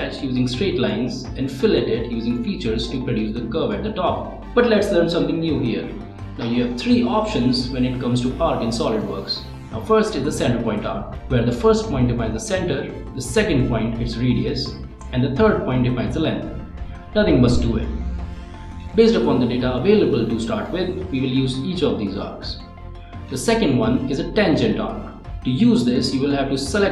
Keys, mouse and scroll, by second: 0.7 right click, 2.0 click, 2.3 ctrl+click, 3.9 click, 5.0 click, 5.6-15.5 right drag, 16.4 right click, 16.6 click.